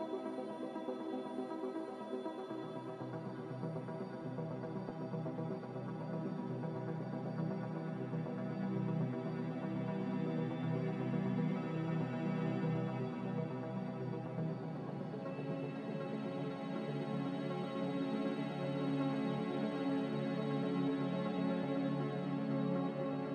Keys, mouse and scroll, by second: 7.9-8.9 typing, 16.0-17.2 typing.